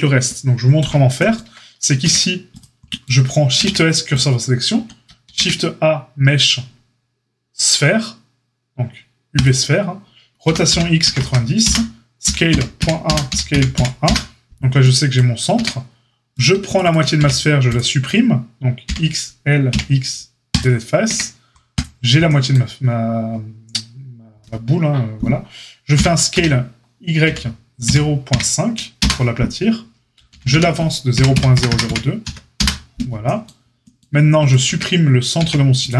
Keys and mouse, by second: 2.0 Tab, 3.5 shift+s, 4.7 Tab, 5.2 shift+a, 10.4 r, 12.2 s, 15.5 Tab, 15.5 s, 16.3 click, 16.3 alt+shift+middle click, 16.6 alt+shift+click, 16.7 alt+shift+middle click, 16.8 alt+shift+click, 16.8-21.7 alt+shift+middle drag, 17.1 x, 18.8 l, 19.7 x, 21.0 Tab, 21.7 click, 21.8-35.9 shift+middle drag, 25.9 s, 30.2 g, 34.6 Tab, 35.3 x.